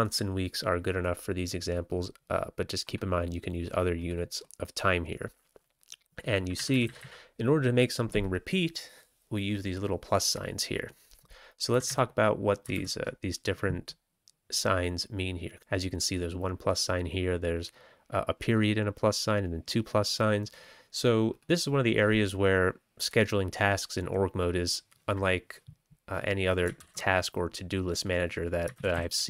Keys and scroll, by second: 6.5 Left, 6.7 Left, 6.8 Left, 6.9 Left, 11.7 Down, 11.8 Down, 12.7 ctrl+a, 26.8 ctrl+k, 28.7 ctrl+x, 28.9 ctrl+s.